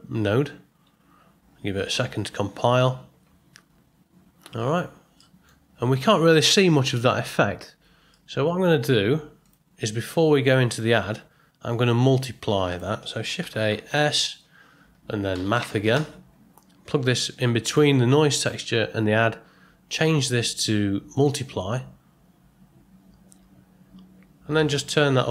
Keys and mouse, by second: 5.2 middle click, 8.3 middle click, 9.4 click, 12.7 click, 13.4 shift+a, 19.9-23.2 drag, 24.5-25.3 drag.